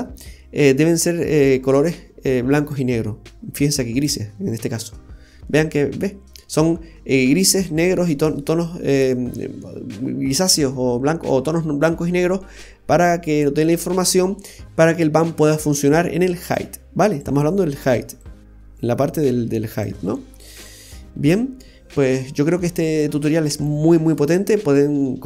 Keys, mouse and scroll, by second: 0.0 scroll up 2, 0.4 middle click, 1.0-1.4 scroll down 5, 2.8 click, 5.0-5.5 scroll up 2, 5.5 middle click, 16.6 click, 18.2 click, 20.8 click, 22.7-23.5 scroll down 2, 23.2 middle click, 25.1-25.2 scroll down 12.